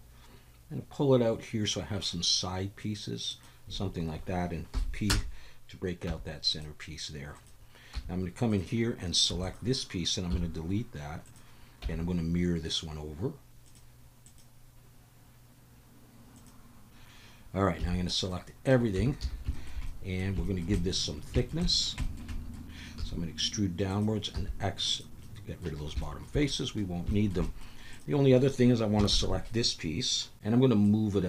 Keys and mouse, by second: 4.7 p, 6.1 Tab, 6.5 click, 7.3 click, 7.9 Tab, 8.5 click, 9.3 3, 9.4 click, 10.3 x, 11.8 Tab, 13.6 click, 14.2-16.5 drag, 17.8 a, 18.3-18.7 middle drag, 19.0 Tab, 19.2 a, 19.5 shift+middle click, 19.8 middle click, 20.4 shift+middle click, 20.7 middle click, 21.4 shift+middle click, 21.6 middle click, 22.0 shift+click, 22.3 click, 23.0 e, 23.9 click, 24.3 x, 25.2 click, 26.0 shift+click, 26.5 middle click, 27.1 shift+middle click, 27.4 middle click, 27.9 click, 29.1 ctrl+l, 29.9 KP_7, 30.5 KP_7, 30.8 click, 31.0-31.2 drag.